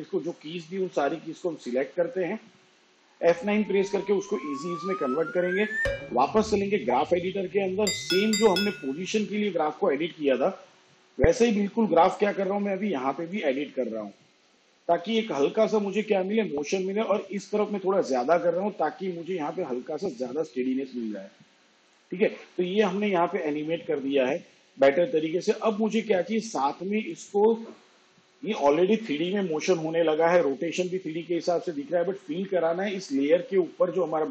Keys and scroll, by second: 1.3 F9.